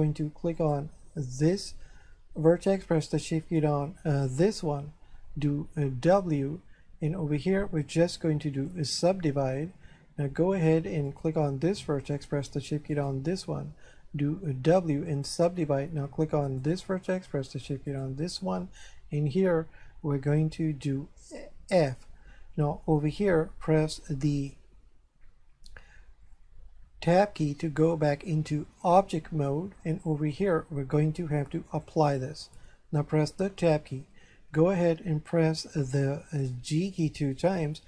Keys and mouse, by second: 0.6 right click, 4.1 shift+right click, 5.9 w, 8.6 click, 11.1 right click, 12.9 shift+right click, 14.4 w, 15.1 click, 16.5 right click, 17.9 shift+right click, 21.5 f, 26.8 Tab, 31.7 click, 33.5 Tab, 37.3 g.